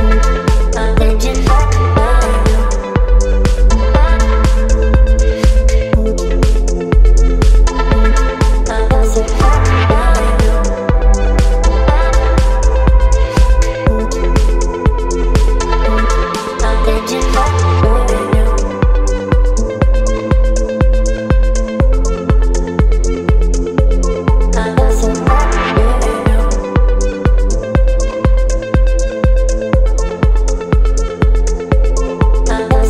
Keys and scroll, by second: 2.7 ctrl+BackSpace, 5.7 Delete, 7.8 space, 13.0 Delete, 14.4 Delete, 17.3 Delete, 17.8 space, 18.0 v, 18.7 space, 22.6 Delete, 22.7 space, 25.0 space, 26.5 space, 30.2 Delete.